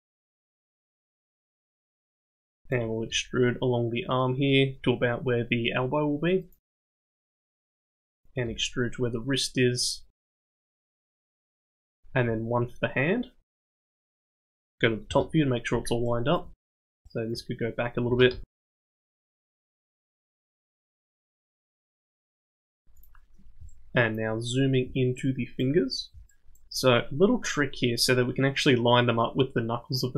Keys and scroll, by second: 3.1 e, 8.4 e, 12.2 e, 15.1 KP_7, 17.2 g, 18.2 g, 19.2 g, 19.9 g, 21.0 g.